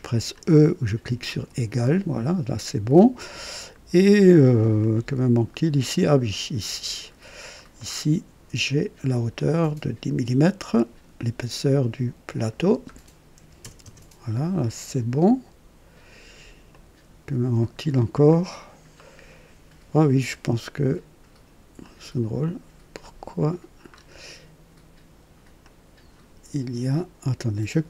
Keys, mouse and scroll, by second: 1.3 typing, 4.8-7.1 drag, 7.4-7.8 scroll down 2, 7.8 right click, 9.3 click, 10.7 click, 12.3 click, 13.4 KP_1, 13.8 KP_0, 13.8 Return, 16.7-18.1 drag, 16.8 typing, 18.3-18.7 scroll down 1, 19.0 right click, 21.8 click, 23.0 right click, 23.9 scroll up 1, 25.6 click.